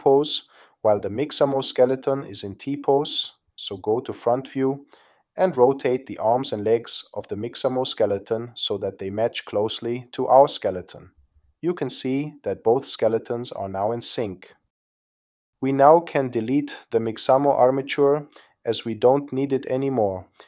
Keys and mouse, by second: 4.6 click, 7.2-8.3 drag, 8.7 click, 9.9 click, 11.6 click, 12.8 click, 14.2 space, 15.8 space, 19.8-20.4 drag.